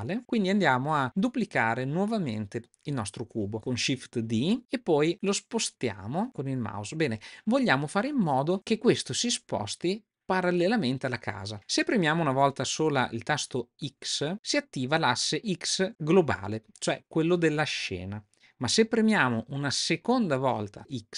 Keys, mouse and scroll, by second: 0.3-0.7 middle drag, 1.0-1.6 middle drag, 2.3 middle click, 4.2 shift+d.